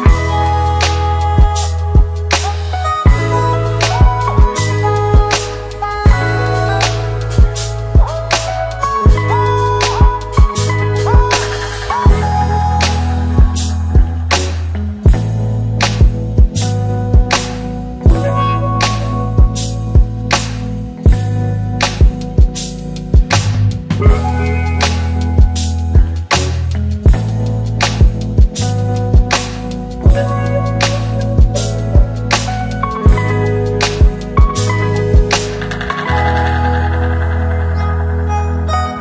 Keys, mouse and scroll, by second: 3.6-4.9 typing, 6.5-8.3 click, 11.1-13.3 drag, 15.7-19.2 click, 23.0-27.5 click, 31.1 ctrl+d, 33.6-34.6 click, 38.3 click.